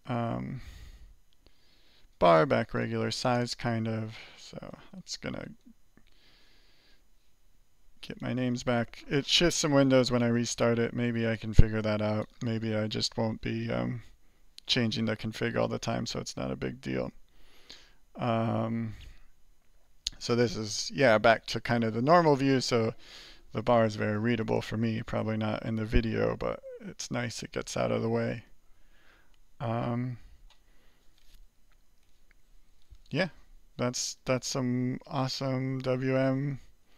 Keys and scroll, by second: 0.0-3.5 typing, 4.6 alt+r, 4.6 typing, 31.7 alt+2, 32.4 alt+3, 34.2 alt+4.